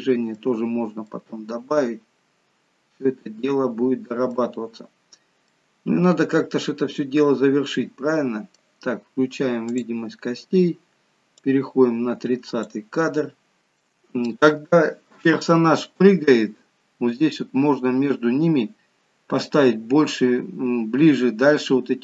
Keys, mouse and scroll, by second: 0.7-1.1 scroll up 2, 1.1 middle click, 5.1-5.6 scroll down 2, 5.6 middle click, 9.8 click, 11.6 click, 13.6 shift+middle click.